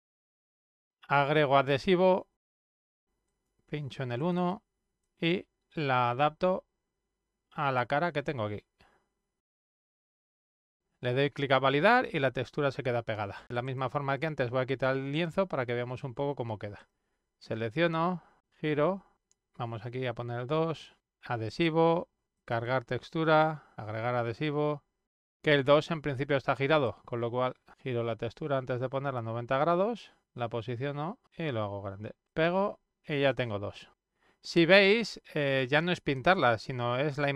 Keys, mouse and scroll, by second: 0.9 click, 3.2 click, 4.2 click, 4.3 click, 5.6-9.3 drag, 9.4 click, 10.0 click, 10.7 click, 12.0 click, 13.6 click, 15.1 click, 16.7 click, 17.9-20.3 drag, 20.6 click, 22.1 click, 23.0 click, 25.4 click, 25.9 click, 27.9-29.9 drag, 30.2-31.6 drag, 31.9 click, 33.1 click, 33.7-36.1 drag.